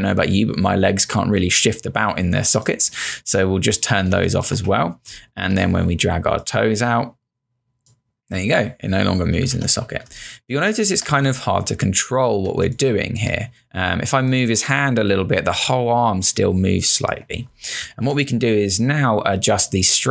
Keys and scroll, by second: 4.2 space, 9.5 z, 10.1 space, 10.9 space, 12.5 space, 17.9 z.